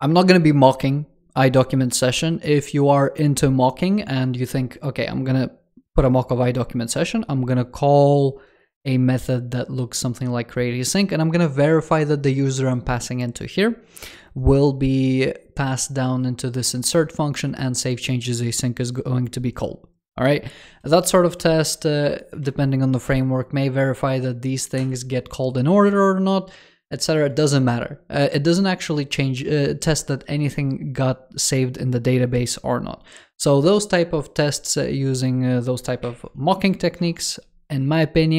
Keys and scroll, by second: 23.0 super+Down, 24.6 super+Up, 35.9 super+g, 36.9 super+Return.